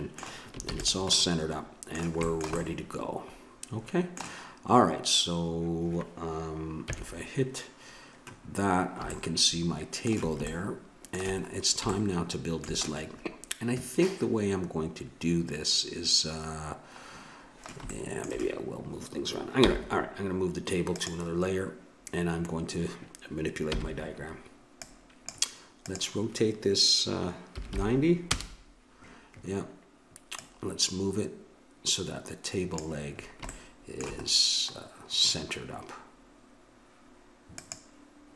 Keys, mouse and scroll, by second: 0.6 ctrl+s, 6.8 KP_1, 10.5-13.7 middle drag, 17.1 middle click, 19.6 m, 23.7 n, 24.8-27.7 drag, 27.7-30.4 middle drag, 30.4-33.1 drag, 33.1 middle click, 37.6-38.3 drag.